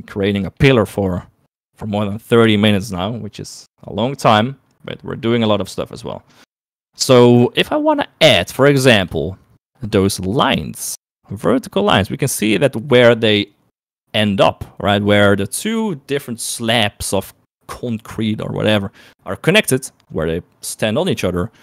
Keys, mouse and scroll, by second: 3.4 click, 3.6 click, 4.9-5.9 middle drag, 6.2 middle click, 6.8 click, 7.2 click, 8.9 shift+middle click.